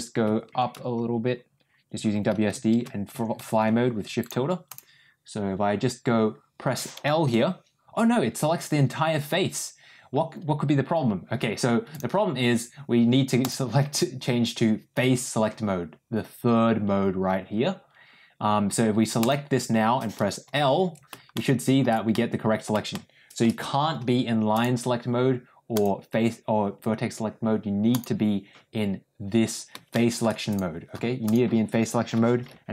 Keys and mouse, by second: 7.2 l, 13.3 click, 19.1 click, 20.4 l, 21.3 middle click, 22.0 middle click, 22.8 shift+middle click, 24.4 click, 25.6 click, 27.8 click, 29.8 shift+middle click, 30.4 click, 31.2 click.